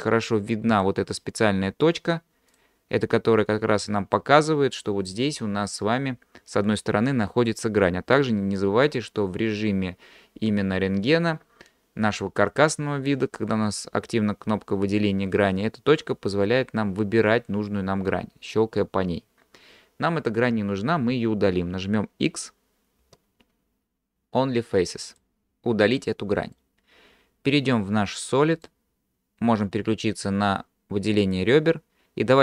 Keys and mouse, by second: 0.7 click, 2.5 click, 3.2-4.2 middle drag, 23.0 x, 26.0 middle click, 28.6 click, 31.2 click.